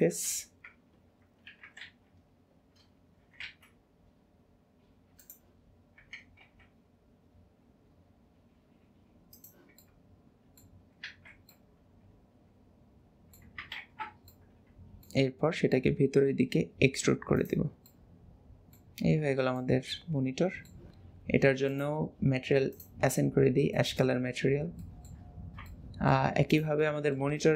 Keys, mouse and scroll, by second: 0.2 KP_1, 1.8 alt+z, 2.5-3.2 scroll up 1, 3.2 s, 9.8 middle click, 12.9 middle click, 13.8 ctrl+z, 14.3 middle click, 17.9-19.0 middle drag, 19.0 Tab, 19.4 scroll down 1, 19.6 middle click, 21.7-23.3 drag, 23.4 scroll down 2, 23.8 middle click, 24.2 scroll down 1, 24.6 scroll down 4, 24.8 shift+middle click, 25.6 middle click, 25.8 middle click, 26.6 click, 26.8 middle click.